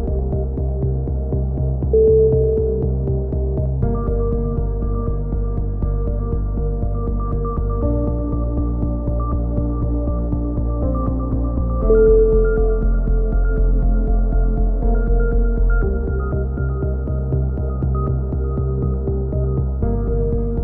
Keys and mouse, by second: 0.7 middle click, 1.7-3.0 right drag, 3.0 click, 5.8-6.9 middle drag, 7.0 click, 8.8-9.8 right drag, 9.4 click, 12.1-15.3 middle drag, 16.2-19.4 middle drag, 19.2-20.6 drag.